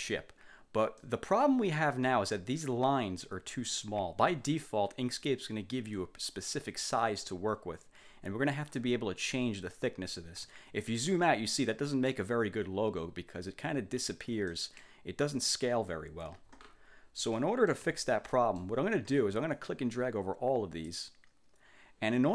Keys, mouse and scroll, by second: 1.1 click, 10.9-11.4 ctrl+scroll down 1, 11.7 ctrl+click, 14.0 ctrl+scroll down 2, 14.6 ctrl+click, 16.5-17.0 ctrl+scroll up 2, 17.1 ctrl+scroll down 2, 17.5 ctrl+click, 17.9 1, 18.4 click, 19.6-21.1 drag.